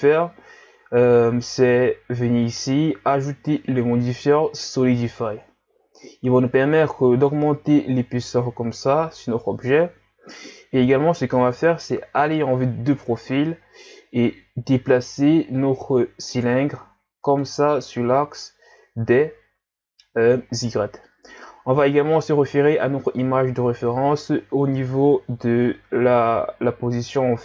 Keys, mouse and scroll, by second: 2.4-5.5 drag, 6.0-9.1 drag, 11.5 KP_3, 13.8-14.4 scroll up 1, 14.4 Tab, 15.6-17.9 drag, 17.9 z, 25.7-27.4 drag.